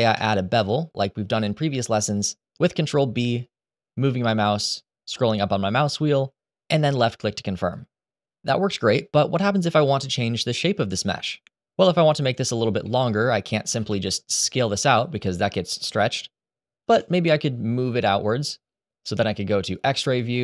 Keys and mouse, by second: 2.5 ctrl+b, 12.6 middle click, 13.4 s, 13.6 x, 16.5 ctrl+z, 20.0 middle click.